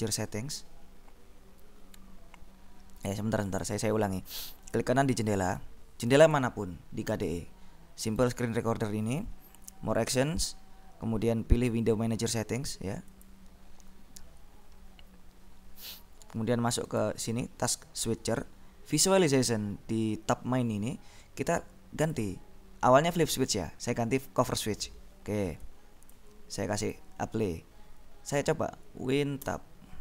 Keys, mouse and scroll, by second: 3.8 click, 5.7 right click, 6.3 click, 8.2 right click, 13.4 click, 16.9 click, 22.1 click, 24.5 click, 26.3 click, 26.6 click, 29.6 Tab.